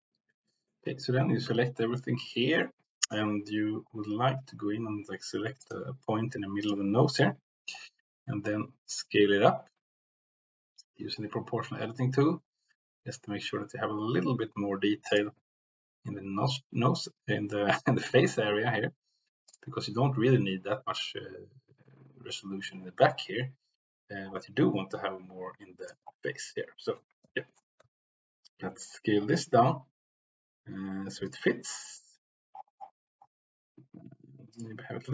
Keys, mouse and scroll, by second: 1.3 a, 5.6 click, 6.5 click, 7.1 click, 8.3 s, 15.0 click, 15.6 s, 19.4 click, 24.8 s, 25.8 click, 27.1 l, 27.7 s, 31.2 click, 32.0 g, 34.5 click.